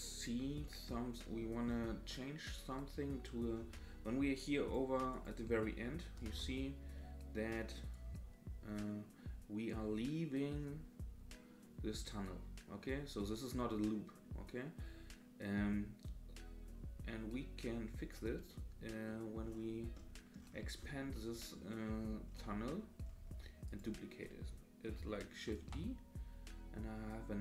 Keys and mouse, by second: 0.6-1.1 drag, 1.1-1.5 middle drag, 2.3 middle click, 4.4-4.7 drag, 5.1 click, 6.2 KP_0, 7.9-18.1 drag, 19.2 middle click, 20.1 middle click, 21.1-21.6 middle drag, 21.9 middle click, 23.6 click, 25.5 shift+d.